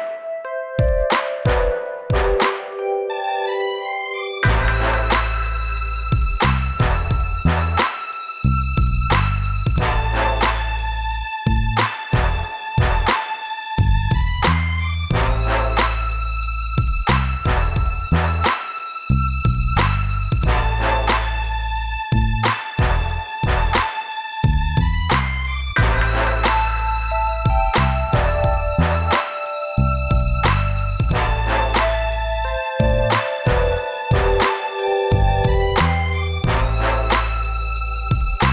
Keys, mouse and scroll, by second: 0.5 click, 13.1 scroll up 1, 13.6 scroll down 2, 14.6 click, 16.0 click, 16.8 scroll up 1, 18.0 click, 19.1 click, 22.8 click, 24.1 click, 24.2 click, 25.0 click, 27.1 click, 28.3 click, 31.4 click, 33.7 click, 35.1 click, 36.8 click.